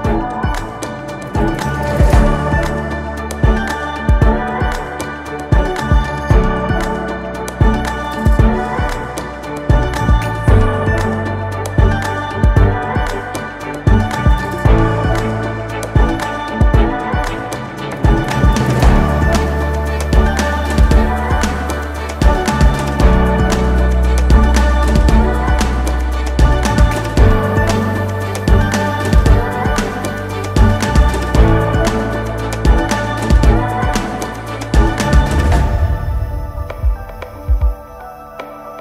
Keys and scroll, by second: 7.6 ctrl+x, 13.7 space, 14.1 space, 29.3 x.